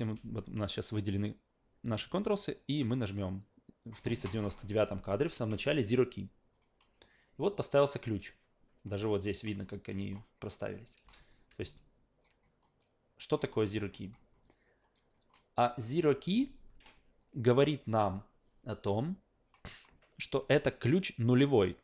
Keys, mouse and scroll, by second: 6.5 click, 8.9 alt+middle click, 9.1 alt+right click, 10.0 click, 10.5 click, 11.0 a, 11.7 alt+right click, 12.4 alt+middle click, 12.8 alt+right click, 13.6 alt+right click, 14.1 alt+middle click, 14.4 alt+right click, 15.1 alt+middle click.